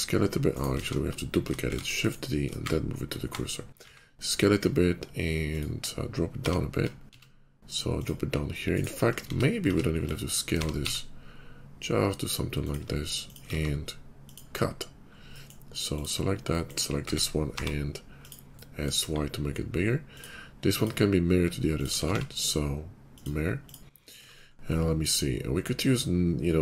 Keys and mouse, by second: 0.7 ctrl+z, 1.6 shift+d, 2.5 shift+s, 3.7 s, 6.2 g, 8.4 middle click, 8.7-21.7 drag, 9.2 ctrl+z, 9.6 ctrl+z, 10.5 g, 13.7 q, 16.9 s, 18.9 KP_5, 21.7 middle click, 21.9-23.1 alt+drag, 22.0 alt+x, 23.1 middle click, 23.1-24.2 drag, 24.1 shift+2, 24.3 drag.